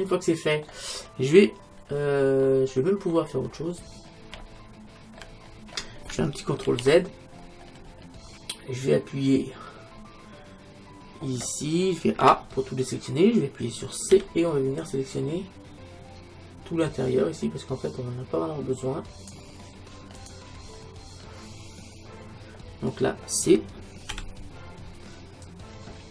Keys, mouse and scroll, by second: 2.0 middle click, 2.5-6.7 middle drag, 6.7 ctrl+z, 7.8-9.9 middle drag, 10.0-12.2 middle drag, 12.2 a, 14.1 c, 20.7-24.1 middle drag, 24.1 c.